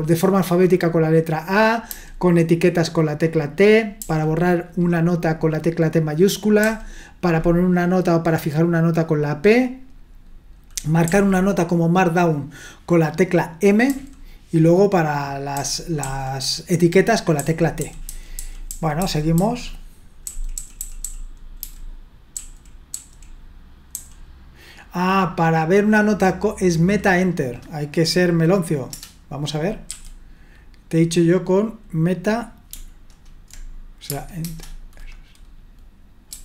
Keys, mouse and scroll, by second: 1.9 j, 4.0 j, 6.6 typing, 11.0 typing, 13.9 typing, 15.5-16.0 typing, 17.4-23.9 typing, 28.9 Return, 29.9 q, 34.4 alt+Return, 36.3 d.